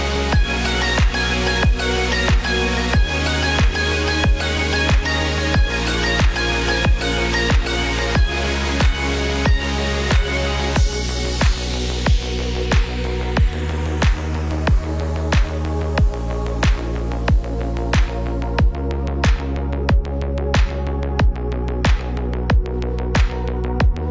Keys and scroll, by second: 19.4 ctrl+0.